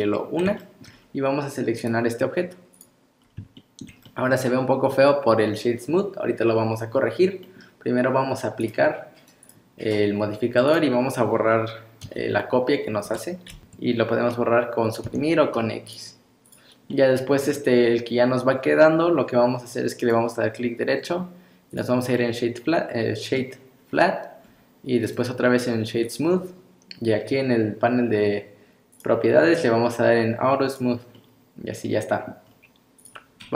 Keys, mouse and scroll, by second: 0.0 middle click, 0.6 shift+middle click, 0.9 scroll down 4, 1.8 click, 3.2 scroll down 2, 3.6 shift+middle click, 4.1 middle click, 6.9 scroll up 1, 7.4 middle click, 8.6 click, 10.7 click, 12.1 g, 15.0 x, 16.4 click, 16.9 middle click, 17.8 scroll up 2, 20.0 right click, 22.2 middle click, 23.9-24.5 scroll down 3, 24.5-25.0 scroll up 2, 25.0 right click, 28.9 click, 30.7 click, 31.1 middle click, 32.4 scroll down 2, 33.0 click, 33.4 scroll up 2.